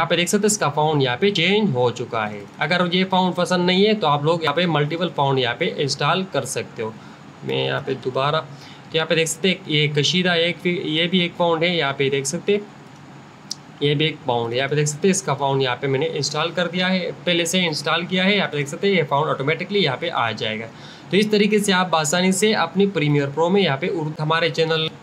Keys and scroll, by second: 6.5-7.6 typing.